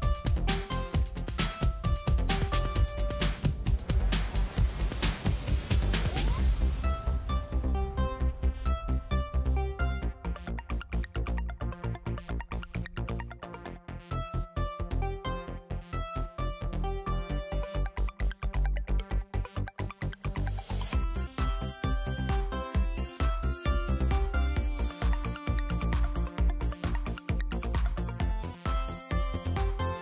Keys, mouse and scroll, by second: 0.7 click, 1.4 click, 3.5 click, 4.2 click, 6.9 click, 9.0-9.6 scroll down 1, 10.5 click, 13.3 click, 15.1 click, 16.7-17.8 drag, 18.1-19.3 drag, 19.9 click, 21.7 click, 22.8-24.4 drag, 24.7 click, 27.3 click.